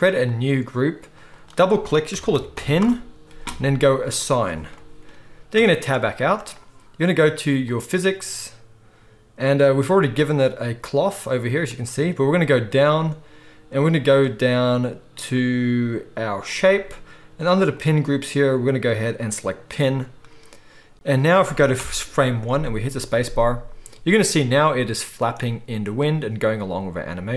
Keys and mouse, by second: 0.2-1.2 drag, 1.2 middle click, 1.4-7.7 drag, 5.6 Tab, 7.7-16.5 middle drag, 16.5-27.3 drag, 21.8 shift+Left, 23.2 space.